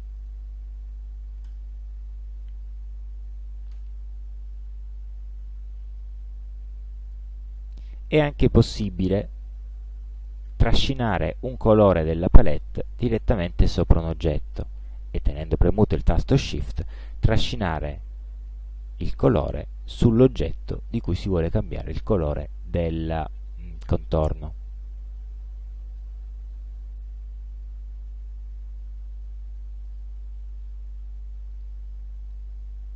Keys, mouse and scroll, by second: 0.3 right click, 1.5 click, 3.8 space, 7.1 click, 12.5-13.7 drag, 19.0-21.8 shift+drag, 26.1 click, 27.1 ctrl+scroll down 2, 27.6 ctrl+scroll up 2, 29.9 click.